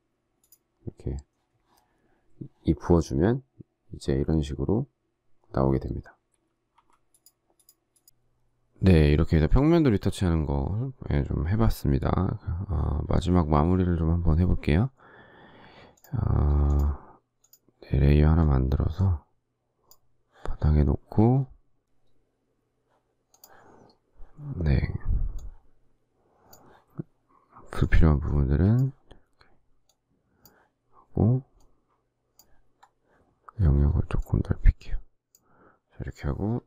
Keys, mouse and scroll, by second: 6.6 z.